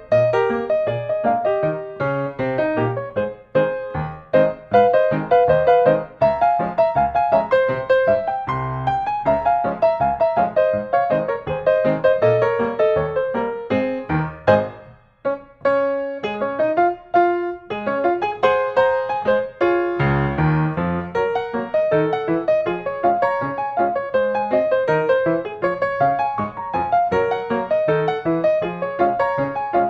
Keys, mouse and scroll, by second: 1.3 click, 3.3 click, 3.6-4.1 scroll, 5.5 click, 5.7 Escape, 5.9-6.4 scroll, 10.1-11.2 scroll, 12.1 click, 15.8 click, 17.3 click, 18.4 click, 19.2-20.3 drag, 22.1-23.2 scroll down 1, 23.2 scroll down 1, 25.2-26.4 middle drag, 26.4 click, 27.4-28.1 scroll down 1, 28.1 scroll.